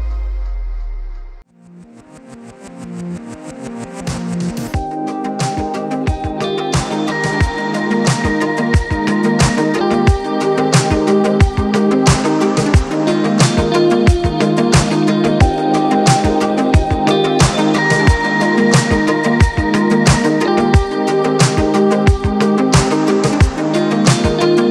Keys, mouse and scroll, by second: 0.0-0.4 scroll down 2, 0.4-1.6 middle drag, 1.6-2.4 scroll down 4, 2.4-3.1 scroll down 1, 3.1-5.1 middle drag, 5.6 alt+h, 7.0 click, 7.3-9.3 middle drag, 10.3-12.8 middle drag, 12.8 click, 15.7 click, 17.4-18.5 drag, 20.7 click, 21.9 click, 23.9 click, 24.5 scroll down 2.